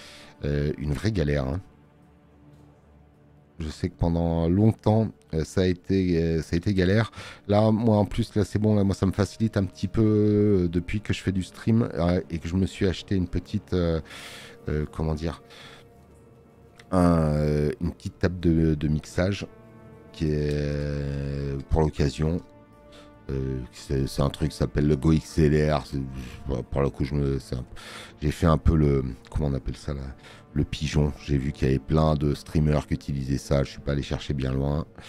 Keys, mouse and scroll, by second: 27.6 space, 27.8 click.